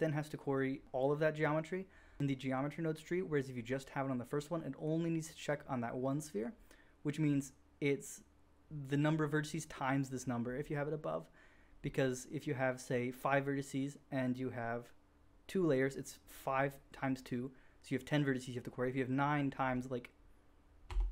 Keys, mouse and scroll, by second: 15.6-16.7 drag, 20.8 Tab.